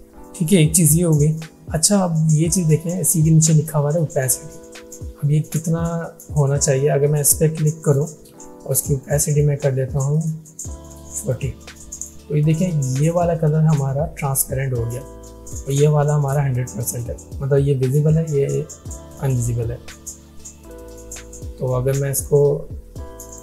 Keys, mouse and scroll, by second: 7.8 click, 9.1 click, 11.2 click, 22.2 click.